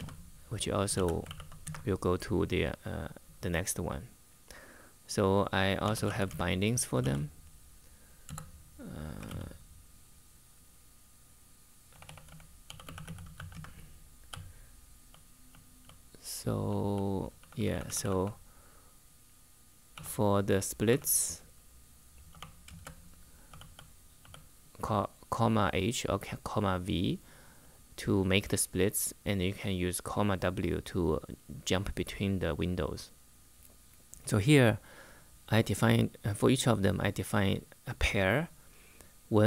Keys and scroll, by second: 0.0-1.5 typing, 5.3-6.7 typing, 8.0-9.5 typing, 11.4-17.9 typing, 19.4-20.6 typing, 22.0-23.9 typing.